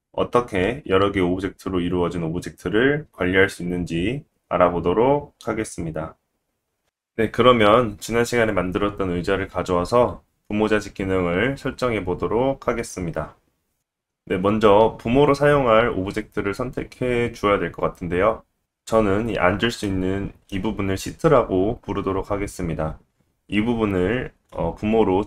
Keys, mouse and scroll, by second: 6.7-9.8 middle drag, 9.8 click, 9.9-12.3 middle drag, 12.3-12.9 scroll up 2, 12.7 shift+middle click, 13.4-19.8 shift+middle drag, 22.8-25.2 middle drag.